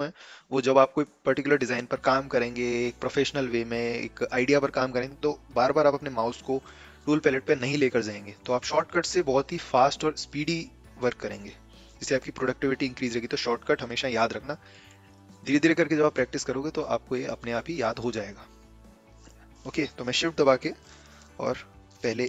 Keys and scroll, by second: 20.1 a.